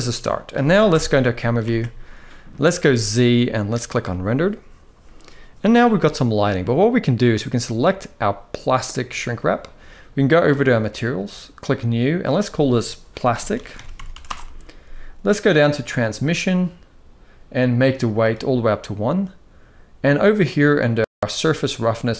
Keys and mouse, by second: 0.6 KP_0, 1.4 ctrl+s, 2.5 z, 7.4 click, 10.3 click, 12.0-13.9 drag, 15.5 click, 17.5 click, 21.8-22.1 drag.